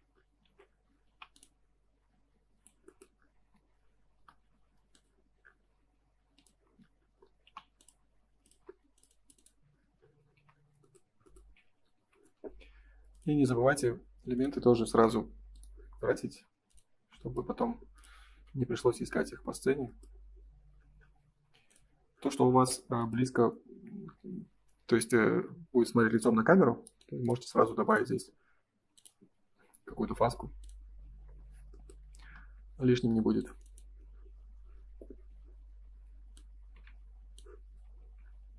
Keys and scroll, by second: 0.3 ctrl+s, 1.0 p, 3.3 space, 4.1 l, 6.5 space, 7.4 p, 8.6 space, 16.9 space, 18.3 ctrl+s, 22.5 ctrl+s, 32.1 space, 32.3 Escape, 37.7 Escape.